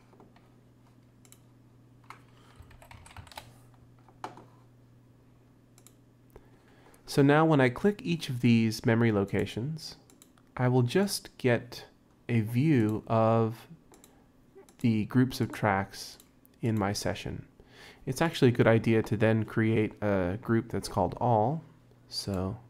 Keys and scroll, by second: 2.6-3.7 typing.